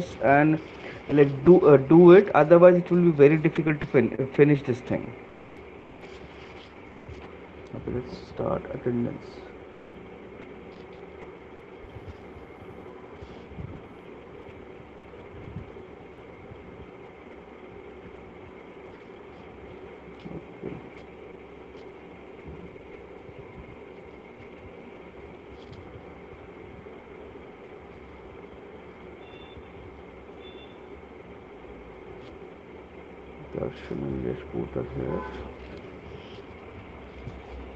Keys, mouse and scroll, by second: 4.8 click, 8.0 click, 9.5 click, 11.7 click, 15.6 click, 15.8 click, 17.6 click, 22.2 click, 24.4 click, 26.6 click, 27.6 click, 31.3 click, 32.1 click, 35.1 click.